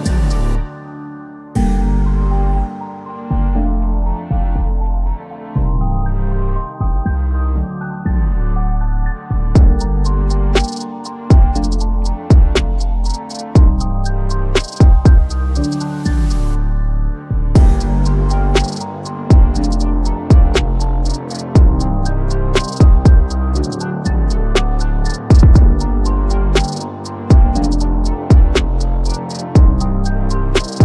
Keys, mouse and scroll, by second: 0.2 alt+scroll down 1, 0.6 click, 4.0 ctrl+d, 5.4 click, 7.4 click, 8.6-10.0 typing, 10.3-11.5 drag, 13.5-14.6 drag, 15.4-16.7 typing, 20.5-21.0 typing, 21.6 click, 24.2 click, 26.9 ctrl+d, 27.6-28.5 drag.